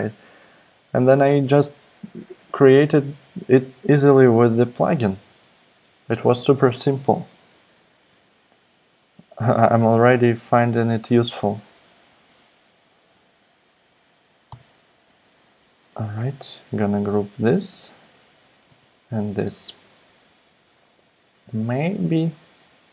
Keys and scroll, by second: 14.5 super+g, 18.7 super+g.